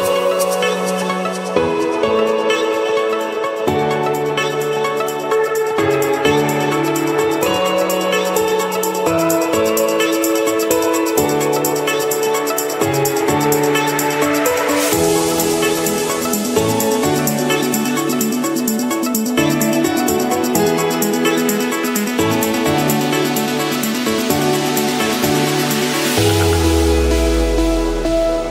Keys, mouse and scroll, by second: 0.0 click, 0.7-2.4 typing, 3.1 Return, 4.9 click, 5.3 scroll down 2, 6.6 click, 7.5 click, 8.8 click, 11.2 click, 12.8 click, 13.3-14.5 scroll, 14.1 middle click, 15.1 click, 15.2 Escape, 16.6 Escape, 17.9-18.2 typing, 19.3 Return, 19.9 click, 20.0 Return, 20.7 click, 21.4 click, 21.6 Return, 22.3 Escape, 23.6 click, 24.4 click, 24.6-25.4 scroll down 8, 25.7 scroll, 26.0 click, 28.3 click.